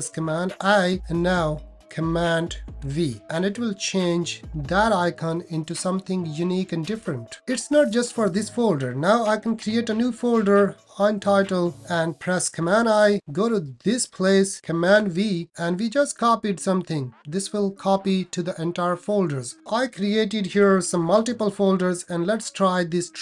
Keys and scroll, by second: 0.2 super+i, 2.7 super+v, 9.6 shift+super+n, 12.6 super+i, 14.9 super+v, 20.5 shift+super+n, 20.7 shift+super+n, 20.9 shift+super+n.